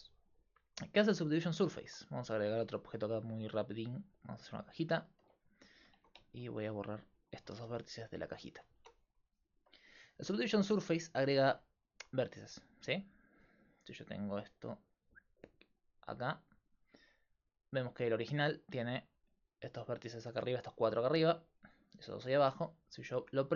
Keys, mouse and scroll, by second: 3.0-4.9 drag, 3.5 shift+a, 6.0 Tab, 6.9 right click, 7.6 x, 8.6 right click, 8.8 Tab, 10.8 click, 17.0-21.2 drag, 23.3-23.5 drag.